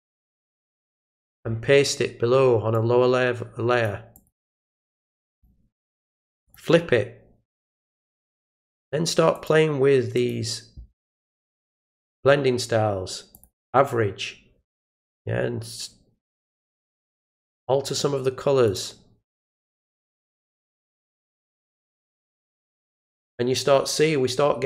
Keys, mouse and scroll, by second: 2.7 click, 4.1 click, 5.3 click, 6.4 click, 9.3 click, 10.1 click, 13.3 click, 17.5 click, 18.6 click, 19.3 click, 20.7 click, 22.5 click.